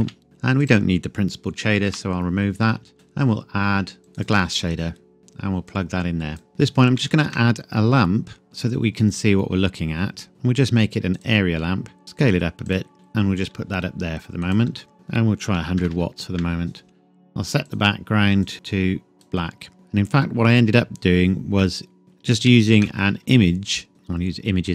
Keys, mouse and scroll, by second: 0.0 n, 0.2-0.6 scroll up 1, 0.6 click, 1.9 Delete, 2.9 click, 4.2 click, 5.2-5.7 scroll down 1, 5.7 click, 5.9 scroll up 1, 6.4 scroll down 1, 7.0 shift+a, 11.2 click, 11.8 scroll down 1, 12.0 s, 12.7 click, 12.9 g, 14.5 click, 14.7 s, 14.9 click, 15.6 KP_1, 15.8 KP_0, 16.3 KP_Enter, 17.7 click, 20.2 scroll down 1, 21.6 middle click, 22.0-22.5 scroll down 1, 22.5 shift+a, 23.9 click.